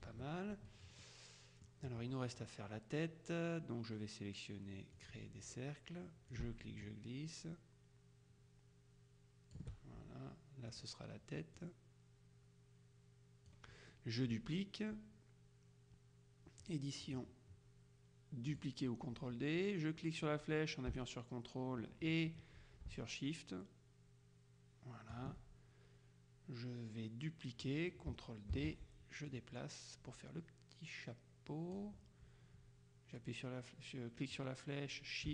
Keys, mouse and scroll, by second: 0.0 KP_Subtract, 1.2-2.2 drag, 5.1 click, 6.4-10.2 ctrl+shift+drag, 10.8 click, 11.7 click, 16.7 click, 18.6 click, 21.1-25.7 ctrl+drag, 28.6 ctrl+d, 29.4-32.3 drag, 34.4-35.3 drag.